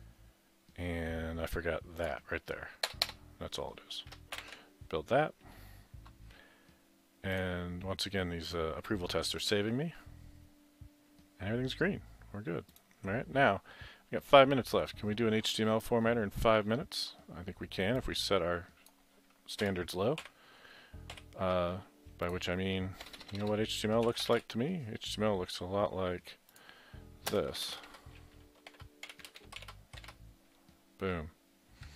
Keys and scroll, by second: 2.9 BackSpace, 3.1 BackSpace, 4.4 ctrl+shift+b, 19.6 ctrl+c, 20.2 ctrl+v, 21.2 ctrl+v, 23.1-24.8 typing, 26.3-30.1 typing.